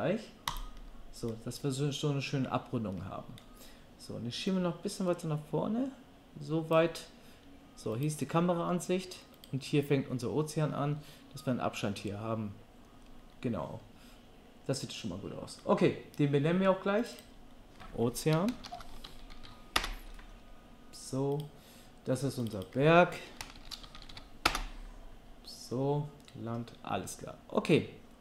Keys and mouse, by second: 8.0-17.0 middle drag, 17.0 click, 17.1 middle click, 17.1-21.4 drag, 21.4-22.4 middle drag, 22.4 click, 22.5-23.6 middle drag, 23.6-28.2 shift+drag.